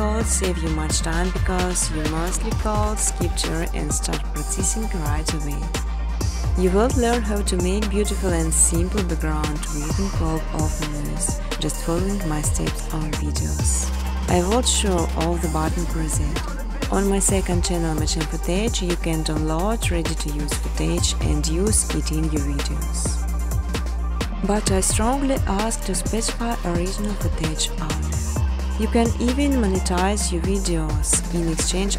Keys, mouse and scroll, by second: 0.8 click, 1.3-3.3 typing, 3.0 Tab, 4.5 Return, 5.1-6.5 typing, 8.4 typing, 11.6 click, 14.1 click, 14.6-15.8 typing, 15.5 click, 17.3-19.4 typing, 21.2 click, 22.2 click, 22.9 click, 23.7 click, 25.2 click, 26.3 click, 28.0 click, 28.5 typing, 28.8 click, 29.7 click.